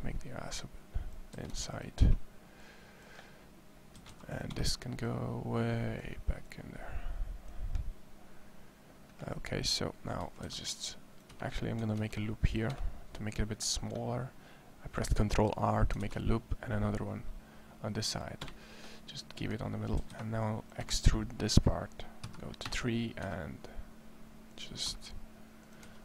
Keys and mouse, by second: 1.1 a, 1.3 c, 3.7 a, 3.9 c, 10.0 a, 10.3 c, 11.7 ctrl+r, 15.8 ctrl+r, 18.7 click, 19.9 a, 20.1 c, 22.0 KP_3, 22.4 KP_3, 23.0 z, 23.1 e, 24.4 click, 24.7 e, 25.7 e.